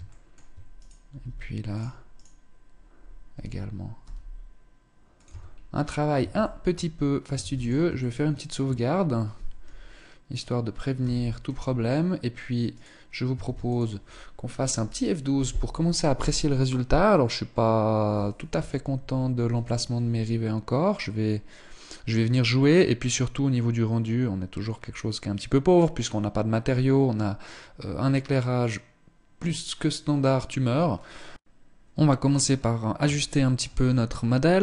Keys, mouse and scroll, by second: 0.3 right click, 0.6 g, 1.3 click, 1.6 right click, 2.8 r, 4.8 Tab, 5.0-5.5 scroll down 3, 5.8 ctrl+s, 7.0 ctrl+s, 7.5 shift+middle click, 10.5 KP_0, 12.2 right click, 13.3 ctrl+s, 32.7 shift+middle click, 33.2-34.2 scroll up 3, 34.2 right click.